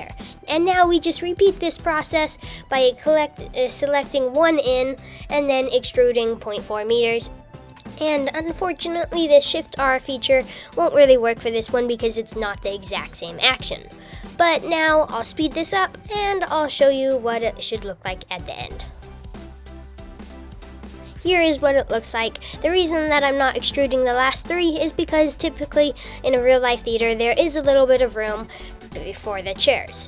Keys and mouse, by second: 0.0 click, 2.5 alt+click, 2.8 alt+middle click, 6.0 ctrl+click, 7.9 e, 16.5 click, 18.8 ctrl+click, 19.2-20.3 typing, 19.9 super+z, 25.9 click, 26.7 shift+click.